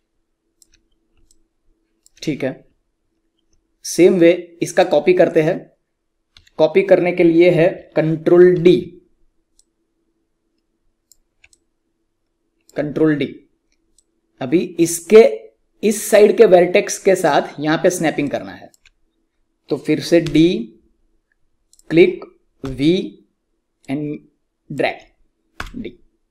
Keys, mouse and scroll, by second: 2.7 alt+scroll up 1, 4.6 click, 6.3 w, 8.5 ctrl+d, 9.5-11.4 drag, 11.4-17.1 alt+drag, 18.0 click, 18.2 alt+click, 18.9-20.2 scroll up 1, 20.2 d, 21.6 click, 22.6-24.8 typing, 23.7 click.